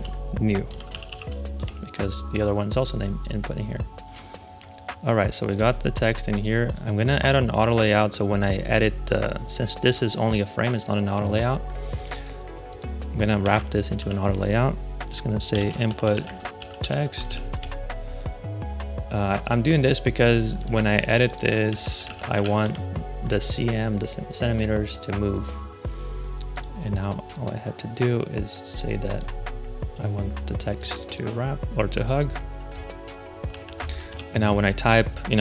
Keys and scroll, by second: 0.0-1.5 typing, 1.5 Return, 13.3 shift+a, 13.9 super+r, 15.2-17.7 typing, 21.4-23.0 typing, 33.4 shift+x, 34.0 super+Return.